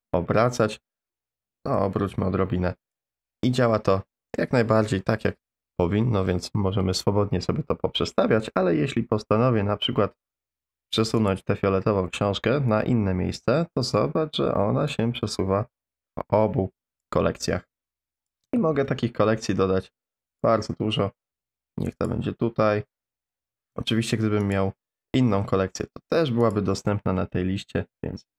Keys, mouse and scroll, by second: 1.3 r, 3.4-4.4 middle drag, 11.2 click, 12.8-13.4 drag, 15.0-17.0 drag, 18.2 click, 18.7 shift+a, 21.3 g, 23.4 shift+a, 25.3 g, 26.9 click, 27.0 middle click, 27.3 r.